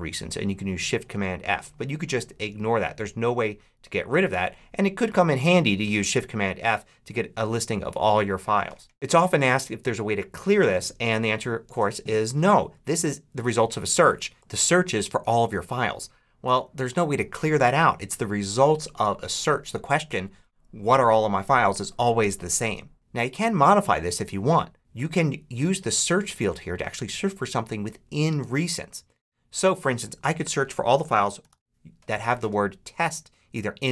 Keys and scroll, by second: 30.8-31.9 typing.